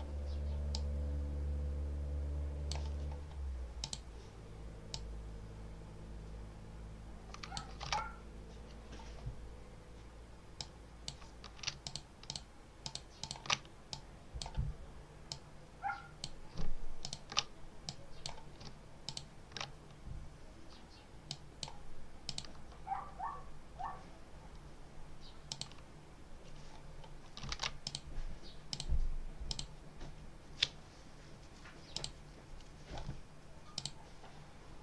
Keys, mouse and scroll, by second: 0.6-2.8 drag, 3.7 click, 4.8-7.6 drag, 7.8 alt+Tab, 10.4 click, 11.7 ctrl+alt+click, 12.2 ctrl+alt+click, 12.7 ctrl+alt+click, 13.8 ctrl+alt+click, 15.2 click, 16.9 ctrl+alt+click, 17.8 click, 19.0 ctrl+alt+click, 21.2 click, 22.2 click, 25.4 click, 27.5 ctrl+s, 27.7 ctrl+click, 28.6 click, 29.4 click, 31.8 click, 33.6 click.